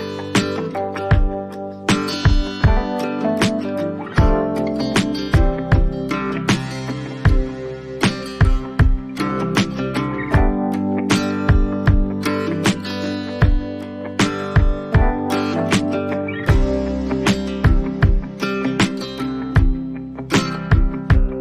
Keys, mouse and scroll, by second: 1.8 click, 3.4 click, 8.3 click, 8.6-10.0 alt+scroll, 10.9-11.9 alt+scroll, 14.7 click, 16.0-17.4 alt+scroll, 17.9 click, 21.0 click.